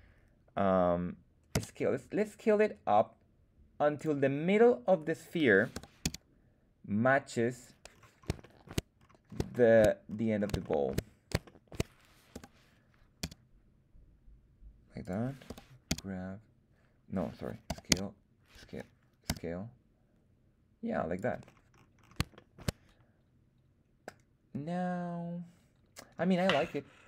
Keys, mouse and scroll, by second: 1.5 s, 3.9 click, 5.7 g, 6.0 z, 7.5 click, 7.8-8.3 scroll up 3, 8.3 shift+middle drag, 8.9-9.4 scroll up 2, 9.4 shift+middle drag, 10.0-10.5 scroll up 3, 10.5 shift+middle drag, 11.4-11.7 shift+middle drag, 12.2 g, 13.1 z, 14.9 click, 15.4 g, 15.8 z, 17.2 Escape, 17.6 s, 17.8 z, 18.5 Escape, 19.2 s, 21.1 click, 21.3-22.2 scroll down 6, 22.3 shift+middle click.